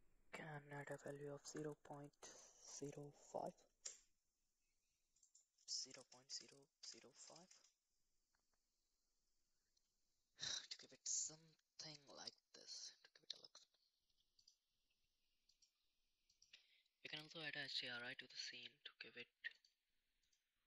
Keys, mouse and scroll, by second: 5.2-7.6 drag, 15.5 click, 18.5-19.6 drag, 20.2 click.